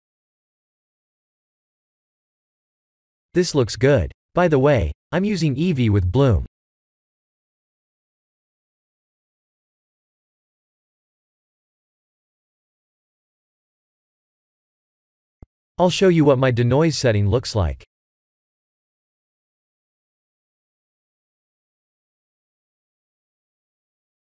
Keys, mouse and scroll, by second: 2.0-3.2 drag, 3.9-6.2 drag, 8.0 click, 8.5 scroll up 4, 10.3 scroll down 3, 12.0 click, 12.8-13.4 scroll up 1, 13.4-13.8 scroll up 1, 15.0 scroll down 2, 21.8 ctrl+s.